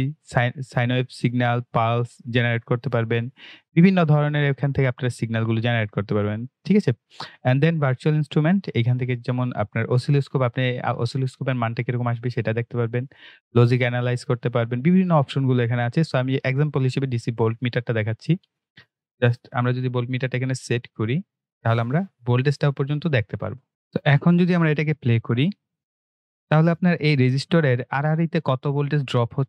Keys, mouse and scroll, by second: 0.2 click, 7.7 click, 17.4 click, 23.7 right click, 25.9 click.